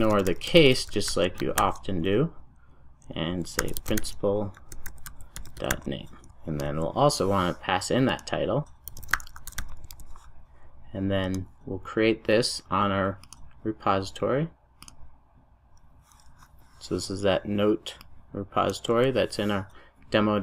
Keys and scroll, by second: 9.9 super+s.